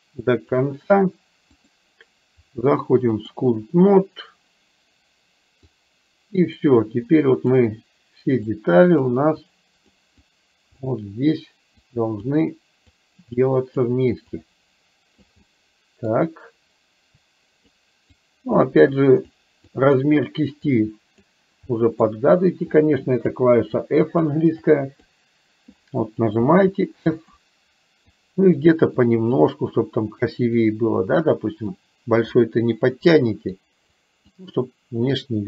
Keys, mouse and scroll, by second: 1.8-3.4 drag, 5.8-6.8 drag, 7.1 click, 8.5 click, 9.5 click, 10.3 click, 11.9 click, 13.0 click, 14.4 click, 15.4 middle click, 17.3 click, 18.3 click, 19.0 click, 19.8 click, 20.8 click, 21.8 middle click, 22.9 click, 23.9 click, 24.6 click, 26.5 f, 28.1 click, 29.0 click, 29.9 click, 30.6 click, 31.8 click, 33.3 click, 34.0 click, 35.3 click.